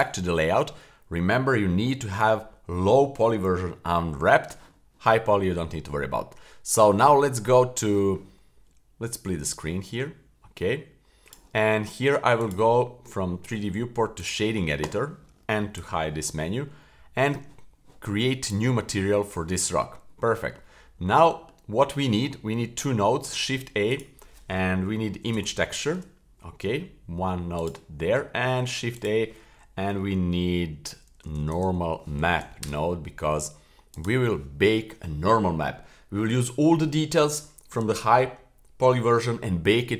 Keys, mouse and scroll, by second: 9.5-11.4 drag, 12.4-14.3 drag, 15.8 n, 18.4 click, 19.7-21.0 scroll up 5, 20.2 middle click, 21.0-21.5 middle drag, 21.8-22.5 scroll down 1, 23.2 shift+a, 28.6 shift+a.